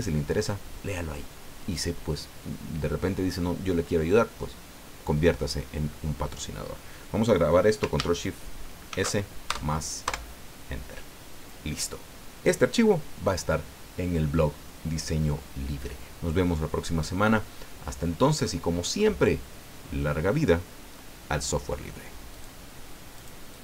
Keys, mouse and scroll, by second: 8.9 ctrl+shift+s, 9.4 ctrl+shift+KP_Add, 10.2 KP_Enter, 22.3 click, 23.2 click, 23.5 click.